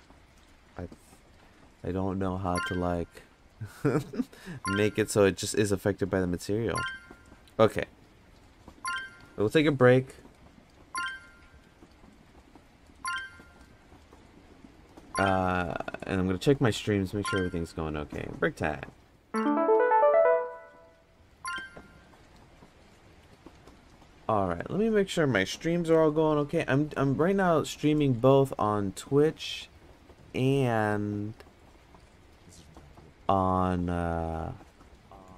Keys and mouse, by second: 0.7 click, 5.6 click.